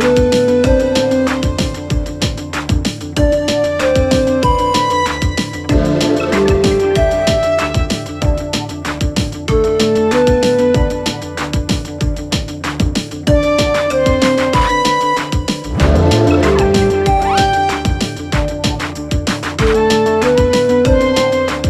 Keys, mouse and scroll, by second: 0.3-1.5 typing, 2.7 click, 5.1 click, 10.2 click, 13.0 click, 14.8 click, 18.9-19.8 click.